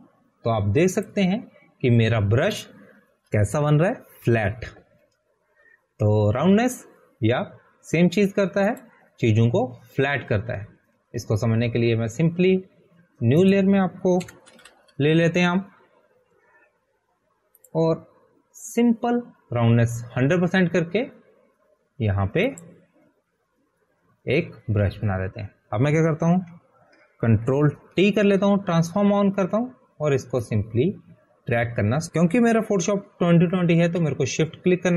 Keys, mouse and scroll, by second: 1.7 click, 4.8 scroll down 1, 8.4 scroll down 1, 11.3 click, 15.9 click, 16.7 1, 17.0 0, 17.2 Return, 20.0 Return, 20.1 click, 24.8 click, 28.7 ctrl+d, 30.4 ctrl+t, 32.9 click.